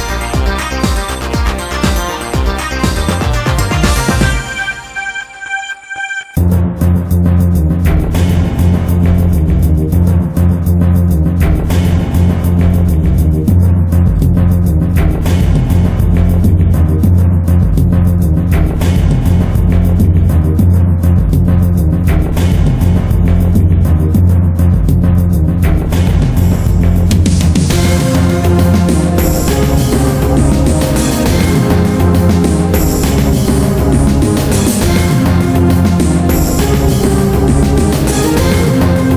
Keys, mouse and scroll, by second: 2.8 shift+click, 3.2 middle click, 3.7 scroll up 1, 3.9 middle click, 4.3 Tab, 5.2 click, 6.5 middle click, 6.7 Tab, 7.0 middle click, 7.8 click, 8.8 middle click, 10.2 Tab, 11.8 click, 12.1 middle click, 12.5 Tab, 12.7 middle click, 17.6 1, 19.1 click, 19.4-20.5 middle drag, 20.9 alt+right click, 21.3 middle click, 22.1 middle click, 23.3-23.8 scroll up 1, 23.8 middle click, 24.1 shift+middle click, 25.0 shift+middle click, 25.8 ctrl+b, 26.6 ctrl+b, 30.4 click, 30.7 middle click, 33.1 click, 34.3 right click, 34.6 middle click, 34.9 scroll down 1, 35.3 shift+middle click, 37.4 click, 38.0 ctrl+b.